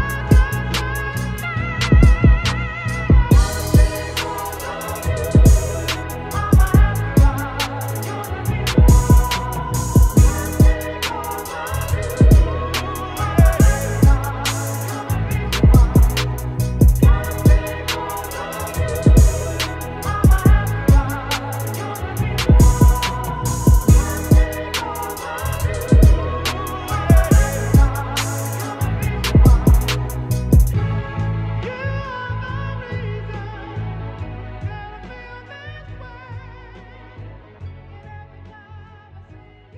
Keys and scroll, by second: 4.2 ctrl+g, 7.8 ctrl+z, 23.4 space, 24.1 ctrl+space, 24.4 ctrl+t, 29.1 Return, 30.6 ctrl+t, 35.1 shift+Return.